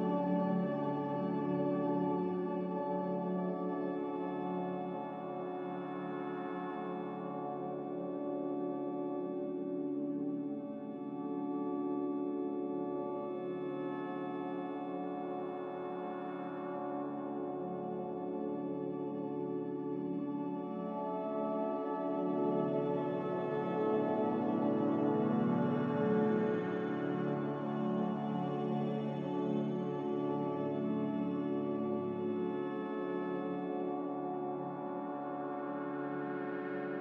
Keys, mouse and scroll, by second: 9.3 Delete, 17.5 ctrl+z, 17.9 ctrl+z, 24.6 ctrl+c, 24.9 ctrl+v, 28.2 ctrl+v, 35.1 ctrl+c, 35.3 ctrl+v.